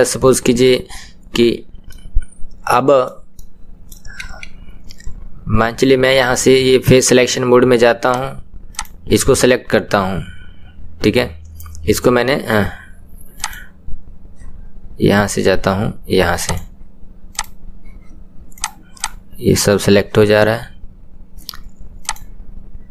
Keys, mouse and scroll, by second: 2.2-4.2 middle drag, 4.2 KP_1, 8.4 click, 13.5-17.4 drag, 19.0 click, 22.1-22.9 drag.